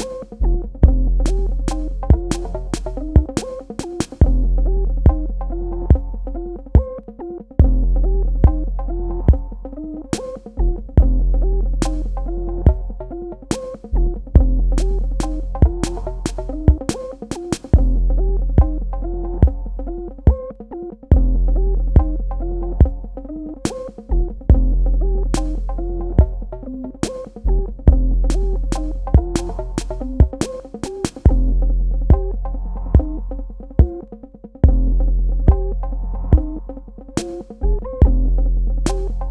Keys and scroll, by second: 15.4 KP_0, 15.6 Tab, 16.1 KP_2, 16.2 Tab, 17.1 Tab, 17.3 typing, 17.5 Tab, 26.0 KP_Add, 28.6 KP_Subtract, 30.4 space.